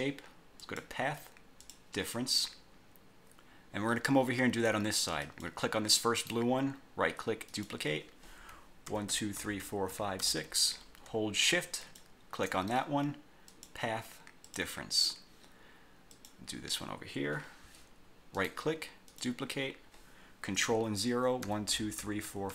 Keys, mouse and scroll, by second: 0.8 click, 1.8 click, 5.4 click, 6.3 right click, 7.6 click, 9.0 ctrl+0, 12.0 shift+click, 13.6 click, 14.6 click, 16.2 click, 18.5 right click, 19.2 click, 21.6 ctrl+o.